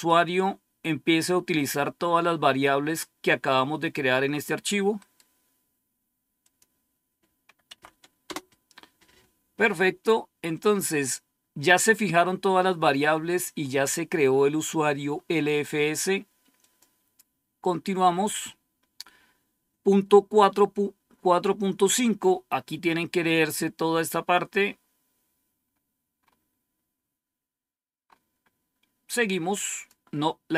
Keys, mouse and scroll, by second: 0.0 click, 4.9 right click, 6.3 click, 7.6 Tab, 7.8 Right, 8.2 Return, 12.9-13.5 scroll up 1, 13.5-15.3 scroll up 1, 16.5 click, 24.0 scroll down 1, 24.6-25.2 scroll down 1, 25.5-26.1 scroll up 1, 26.1 scroll up 1, 26.9-27.2 scroll down 2, 28.0 scroll up 2, 29.6 click, 30.2 click.